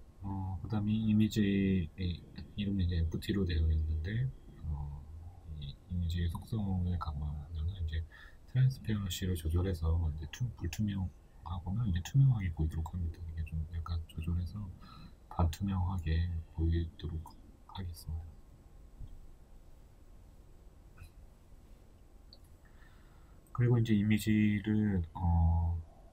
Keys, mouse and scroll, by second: 1.5 right click, 3.2-8.2 drag, 8.2-9.7 middle drag, 9.7-10.6 scroll up 2, 10.6-13.0 scroll up 1, 13.0-14.7 middle drag, 13.0 KP_1, 14.4-14.7 scroll down 2, 14.7 right click, 20.7 right click, 21.7 g, 25.0-26.1 shift+middle drag, 25.3 scroll up 1.